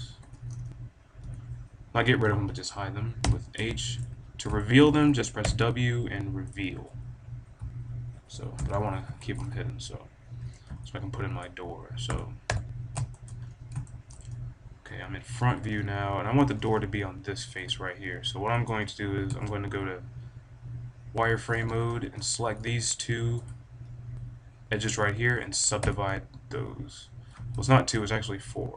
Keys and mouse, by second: 0.0-1.1 typing, 0.4 middle click, 3.1 h, 3.7-5.0 drag, 5.3 w, 8.5 ctrl+z, 10.5-12.0 middle drag, 12.0 KP_1, 12.4 KP_5, 13.1-15.5 drag, 15.5-17.7 middle drag, 16.3 b, 17.7 click, 18.8 middle click, 19.7 z, 21.4 b, 23.5-25.2 drag, 25.2 middle click, 25.8 w, 27.6-28.7 middle drag.